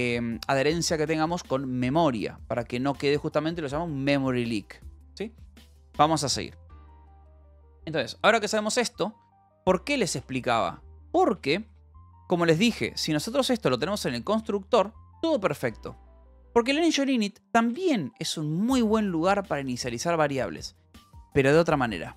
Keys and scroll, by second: 10.3 k, 11.5 j, 12.3 j, 13.9 u, 16.1 j, 17.7 j, 18.8 space.